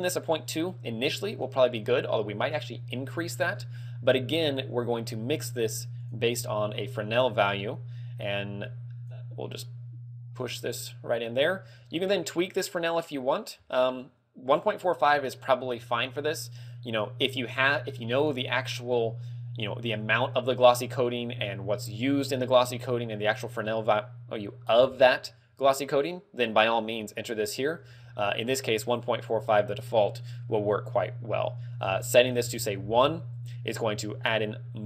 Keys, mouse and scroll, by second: 0.8 scroll down 2, 1.2 middle click, 3.2 middle click, 3.6-4.3 scroll down 4, 4.3 shift+a, 7.7 click, 9.7 click, 11.6 click, 16.8 click, 18.8 click, 20.0 click, 22.8 e, 28.1 click, 31.9 ctrl+click, 33.1 ctrl+click.